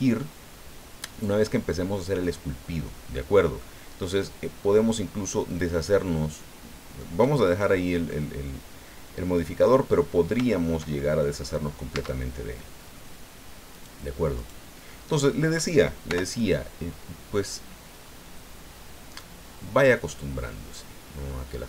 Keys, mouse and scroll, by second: 5.5 click, 6.1-7.2 middle drag, 7.8 scroll down 1, 8.1-9.9 middle drag, 10.1 scroll up 1, 10.5 shift+middle click, 11.3 middle click, 11.9 Tab, 12.3-13.0 scroll up 2, 13.7 right click, 14.4 right click, 16.1 o, 17.3-18.7 drag, 18.7 scroll up 1, 19.1 scroll down 1, 20.0 scroll up 1, 20.6-21.0 scroll up 1, 21.2 scroll up 1.